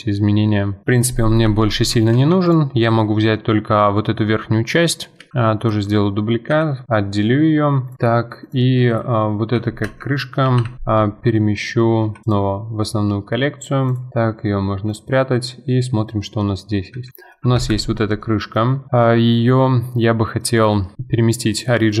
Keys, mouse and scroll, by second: 0.8 middle click, 1.5 Tab, 1.9 Tab, 2.1 3, 2.5 click, 2.8-5.3 middle drag, 5.3 shift+d, 6.5 p, 7.9 click, 8.4 click, 8.9 click, 9.8 F2, 13.9 click, 14.9 click, 16.2-16.9 middle drag, 16.9 s, 18.2-20.9 middle drag, 20.9 alt+s, 21.0-22.0 middle drag.